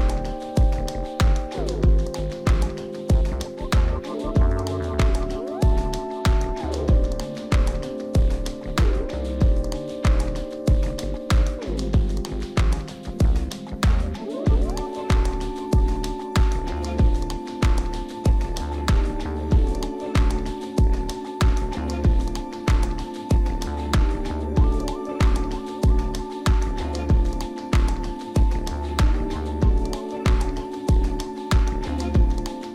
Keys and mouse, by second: 0.7 click, 2.0 click, 2.9 middle drag, 3.6 click, 4.6 right click, 5.0 right click, 5.5 click, 5.8-6.9 drag, 7.2 click, 8.1 right click, 8.7 click, 9.6 right click, 10.4 click, 11.4 middle drag, 11.7 right click, 12.2 click, 13.1 right click, 13.6 click, 15.1-16.3 drag, 16.9 right click, 18.3 click, 20.1-21.3 drag, 21.8 right click, 22.9 right click, 23.2 click, 23.6 click, 25.0 click, 25.6 right click, 25.9 middle click, 26.1 r, 26.5 r, 30.2 right click, 30.5 middle click, 30.7 middle click, 31.1 r, 31.4 right click, 32.6 r.